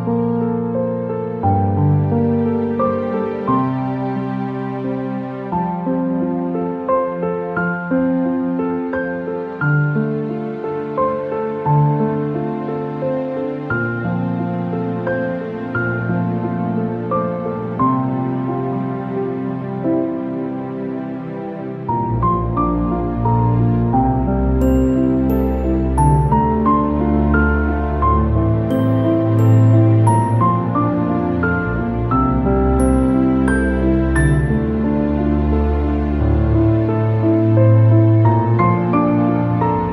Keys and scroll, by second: 4.6 ctrl+k, 14.3 ctrl+shift+., 22.7 ctrl+shift+., 30.7 ctrl+-, 37.7 ctrl+alt+shift+=.